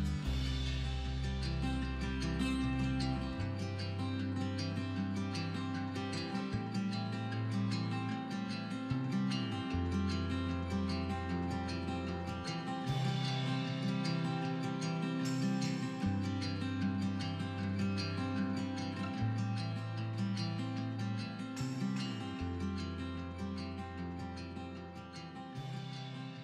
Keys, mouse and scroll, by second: 0.0-0.4 middle drag, 0.3 scroll up 2, 0.4 click, 0.5-1.4 middle drag, 0.8 Tab, 1.1 scroll up 2, 1.4 scroll down 2, 1.8 KP_7, 2.0-2.6 scroll up 2, 2.2 shift+middle click, 2.9 ctrl+r, 4.4 click, 5.1 ctrl+r, 6.1 click, 6.4 scroll down 1, 6.5 middle click, 6.9 click, 7.0 scroll up 1, 7.2-9.7 middle drag, 7.3-7.6 scroll down 1, 7.6 Tab, 8.4 scroll up 1, 8.7 scroll down 1, 9.1 shift+a, 9.7 scroll down 2, 9.9 s, 11.0 click, 11.1 middle click, 11.2 scroll up 2, 11.4 middle click, 11.7 KP_1, 12.4 g, 13.1 click, 13.3 middle click, 13.4 scroll up 2, 13.5-14.2 middle drag, 14.2-14.5 scroll down 2, 14.6-15.0 scroll up 1, 15.0 middle click, 15.3 s, 16.1 click, 16.2-16.5 scroll down 1, 16.5 Tab, 16.6 middle click, 17.1 scroll up 1, 17.4 scroll down 1, 17.4-18.5 middle drag, 17.6 scroll up 1, 18.5 click, 18.9-21.2 middle drag, 19.2 r, 19.4 right click, 19.7 e, 20.3 click, 20.3 scroll down 1, 20.7 Tab, 21.2-22.2 drag, 22.2 middle click, 22.6-23.8 drag, 23.8-24.3 middle drag, 23.9 scroll up 2, 24.3 right click, 24.6-25.7 middle drag, 25.0 scroll up 2, 25.1 scroll down 2, 25.7 click, 25.9 Tab, 26.0-26.3 middle drag, 26.3 ctrl+r.